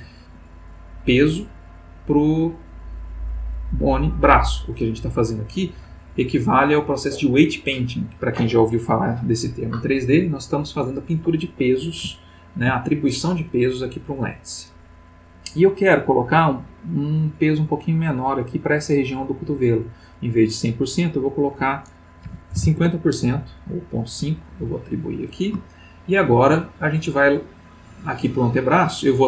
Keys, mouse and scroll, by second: 12.1 ctrl+middle click, 16.1 click, 17.0-18.4 drag, 21.1 click, 22.2 ., 22.6 5, 22.8 Return, 24.6 click, 25.8 shift+middle click, 28.3 click.